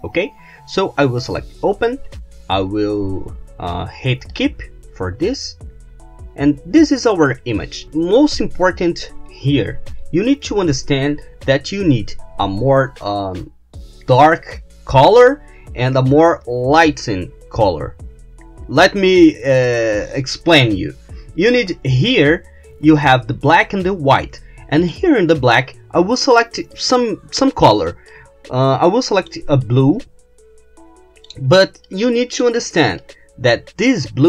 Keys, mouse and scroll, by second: 1.3 click, 4.4 click, 5.4-7.4 middle drag, 24.9 click, 26.8 click, 28.2 click, 29.7-31.5 drag, 31.9 click, 33.1-34.2 drag.